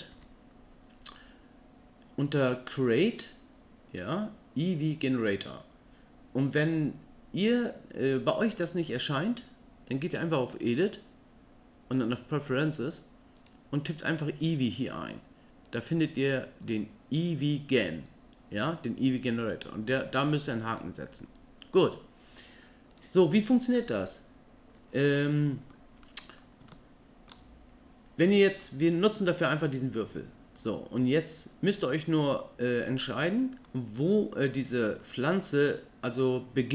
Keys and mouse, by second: 0.1 n, 10.4-12.1 drag, 22.9 click, 25.3 middle click, 26.0-26.4 middle drag, 26.7-27.3 ctrl+middle drag, 28.3 middle click.